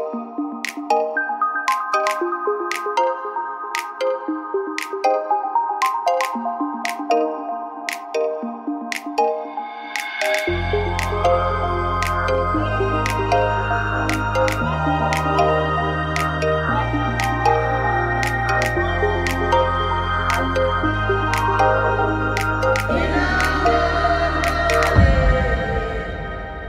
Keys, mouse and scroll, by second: 1.7-3.0 middle drag, 3.0-4.4 drag, 4.4 f, 4.5 a, 4.9-6.4 drag, 6.1 f, 6.1 a, 6.5-7.5 drag, 8.8 f, 8.9 a, 9.5-11.3 drag, 11.8 f, 11.8 a, 14.0 click, 14.6-15.7 right drag, 14.9 x, 16.7 ctrl+z, 16.9 x, 18.4-20.4 drag, 19.7-20.7 right drag, 20.4 f, 20.5 a, 21.1 right click, 21.9-23.5 middle drag, 22.4-24.3 right drag, 23.5 f, 24.3 ctrl+z, 24.3 a, 24.6 ctrl+z, 25.1 right click, 25.5 f, 25.5 a.